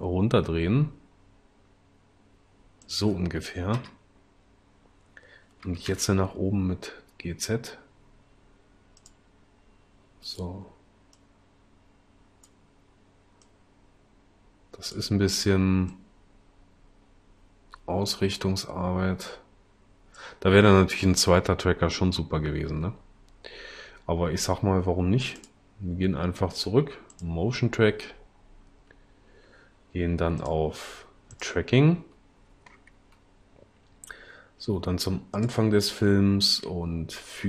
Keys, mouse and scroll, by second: 3.8 0, 5.6 g, 5.9 z.